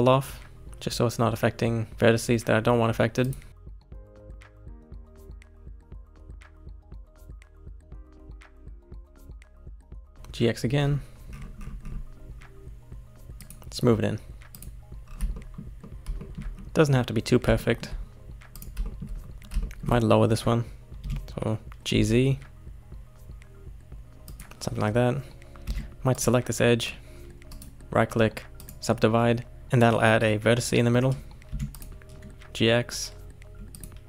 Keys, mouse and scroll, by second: 3.5 scroll down 1, 3.7 shift+middle click, 4.3 click, 4.7 g, 6.8 shift+middle click, 6.9 scroll down 2, 7.2-8.4 shift+middle drag, 8.4-8.8 scroll up 5, 8.8 shift+middle click, 9.1 click, 9.7 g, 14.5 click, 15.0-15.3 scroll down 3, 15.3-18.5 shift+middle drag, 18.5 click, 18.8 shift+middle click, 19.1 scroll up 2, 19.6-21.0 shift+middle drag, 21.0 g, 25.6 2, 26.1 click, 27.5-29.6 right drag, 31.5 1, 31.7 click, 32.4 g.